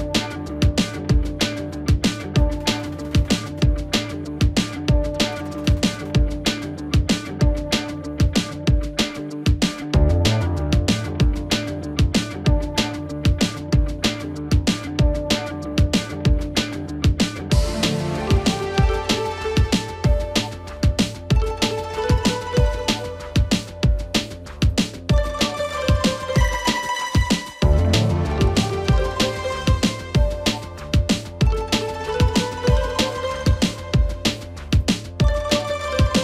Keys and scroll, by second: 29.0 ctrl+j, 34.4 ctrl+j.